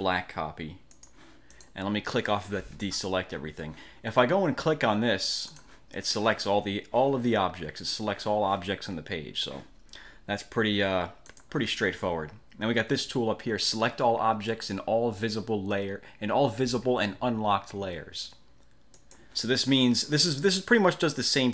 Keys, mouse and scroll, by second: 1.0 click, 1.6 click, 5.6 click, 11.4 click, 19.1 click.